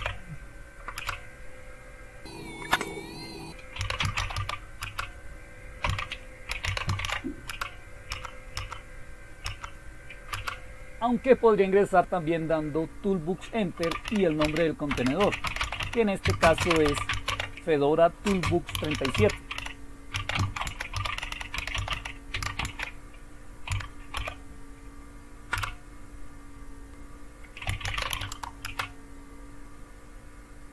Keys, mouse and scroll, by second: 0.0 y, 0.9 Return, 3.5-11.2 typing, 9.4 Up, 13.5-24.1 typing, 25.3-26.0 typing, 27.4-28.6 typing.